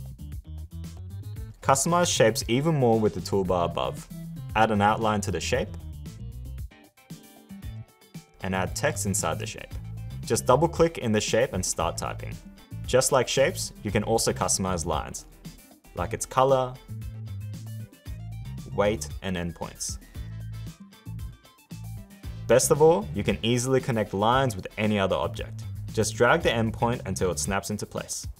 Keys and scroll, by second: 14.8 l.